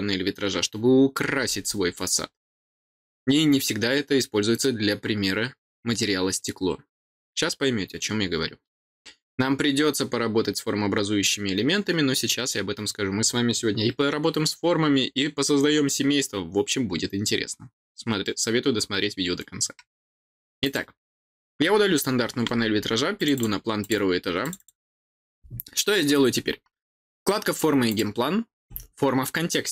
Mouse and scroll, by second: 20.6 click, 23.1 click, 23.3 click, 23.7 click, 24.4 click, 27.8 click.